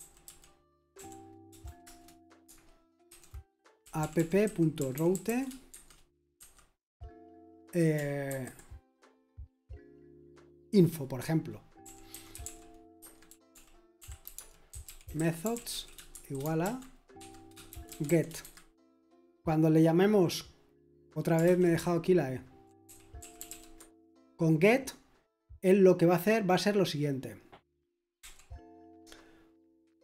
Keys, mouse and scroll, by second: 0.9 o, 1.8 Return, 2.8-6.4 typing, 8.3-10.8 typing, 12.4-18.4 typing, 18.4 Escape, 22.1-24.0 typing.